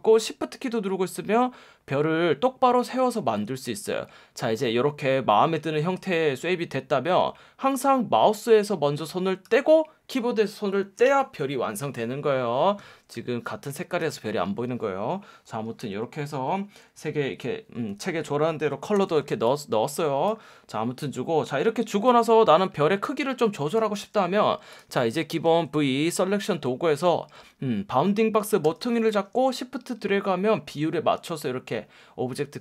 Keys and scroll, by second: 18.9 v, 25.4 F1, 28.6 F1.